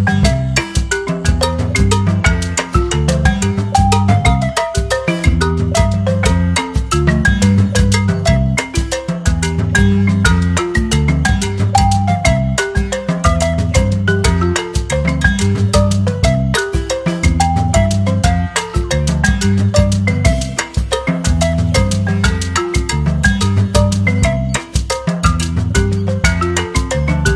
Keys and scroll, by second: 11.5 d, 14.6-17.0 typing, 19.3-20.1 typing.